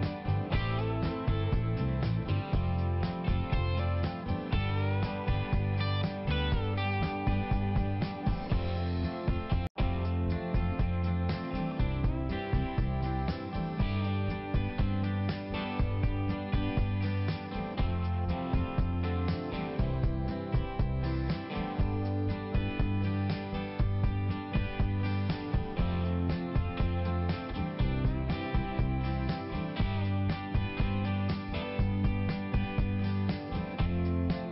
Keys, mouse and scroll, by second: 0.0-1.2 typing, 1.2 click, 3.8 click, 4.4 click, 5.1 click, 5.7 click, 6.1 click, 6.7 click, 7.1 click, 7.3 click, 7.6 click, 7.7 double click, 7.9 double click, 8.0 double click, 8.4 double click, 8.8 click, 9.0 click, 9.9 click, 10.0 click, 11.2 click, 11.3 click, 13.0 click, 16.0 click, 16.1 click, 19.4 typing, 21.3 typing, 21.5 click, 31.3 click.